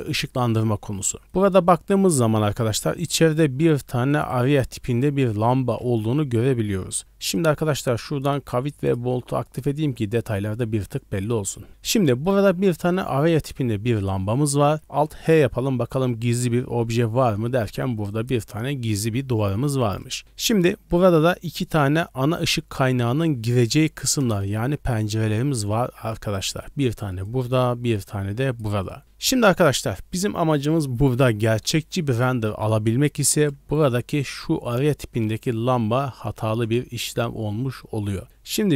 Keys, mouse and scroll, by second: 1.2-2.1 scroll down 3, 1.3 middle drag, 2.6 middle drag, 2.6 scroll down 1, 4.2 right click, 5.9 middle click, 7.3-9.9 drag, 11.3 middle click, 14.1-14.8 middle drag, 16.2 alt+h, 16.7 middle drag, 18.1 right click, 19.7 middle drag, 24.6 d, 24.9-26.6 drag, 26.6-27.2 d, 27.2-28.6 drag, 28.6 d, 28.8 right click, 28.8 d, 29.0 middle click, 29.0 scroll up 1, 32.1 click, 32.1 right click, 33.2 h, 34.7 click, 34.7 right click, 36.3 ctrl+z, 37.0 click, 37.0 right click.